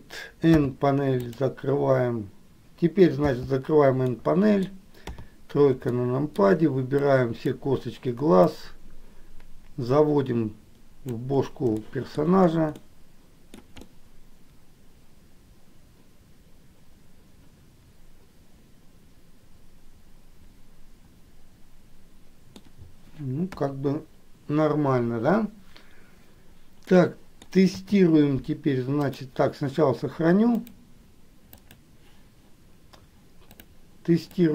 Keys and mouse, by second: 3.5 n, 4.3 middle click, 5.3 KP_3, 6.2 shift+middle click, 7.3 click, 8.8-11.6 drag, 12.1 shift+middle click, 13.1 middle click, 14.0-23.0 middle drag, 23.8 KP_1, 27.2 middle click, 27.9 KP_3, 29.3 click, 31.0-32.3 drag, 33.8 click.